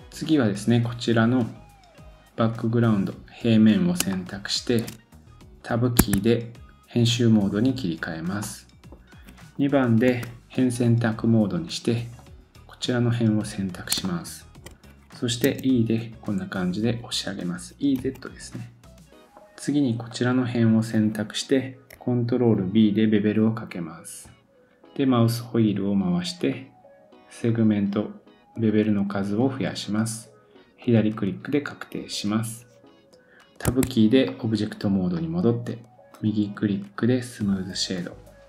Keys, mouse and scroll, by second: 4.1 shift+middle click, 6.0 Tab, 8.4 middle click, 10.1 2, 12.2 click, 13.9 shift+click, 14.0 shift+middle click, 15.4 e, 17.0-19.3 drag, 19.3 middle click, 19.3-20.1 scroll down 2, 20.1 click, 20.1 middle click, 20.1 right click, 22.6 ctrl+b, 30.8 click, 33.7 Tab, 34.2 middle click, 36.1 right click.